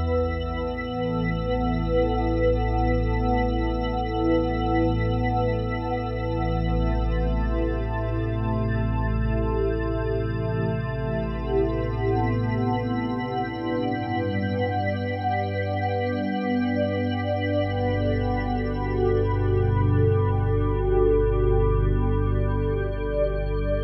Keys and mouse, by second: 0.0 click, 2.7-3.2 drag, 4.6-7.1 drag, 9.8-10.9 right drag, 10.9 click, 12.3-14.9 typing, 15.1 Return, 16.4-17.6 drag, 17.4-18.1 typing, 19.0-22.4 drag.